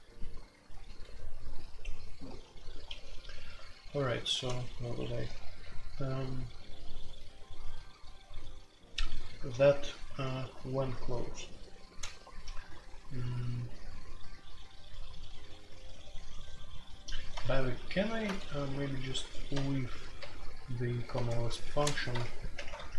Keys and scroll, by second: 0.8 ctrl+d, 2.8 ctrl+d, 5.2 typing, 9.5 ctrl+u, 10.9 ctrl+u, 12.1-12.6 typing, 20.2 super+j, 21.7 ctrl+t, 22.5 alt+Home.